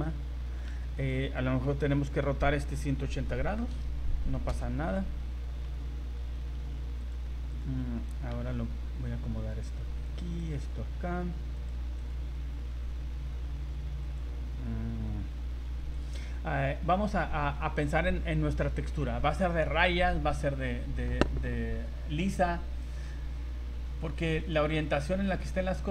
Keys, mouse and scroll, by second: 0.6 click, 1.0 right click, 1.8 r, 5.2 scroll up 1, 5.6 g, 7.5 right click, 8.3 g, 10.4 right click, 10.5 g, 12.0 right click, 12.4 g, 16.2 scroll down 1, 16.6 scroll up 1, 16.9 a, 17.2 scroll down 1, 17.4 a, 17.5 scroll up 1, 22.1 scroll down 1, 22.4 scroll up 1, 22.8 right click, 23.9 g, 24.8 right click, 25.0 g.